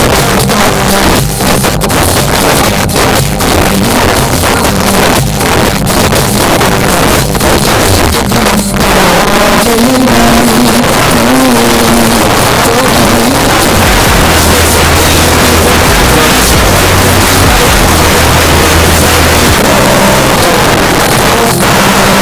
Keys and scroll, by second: 19.6 Page_Down.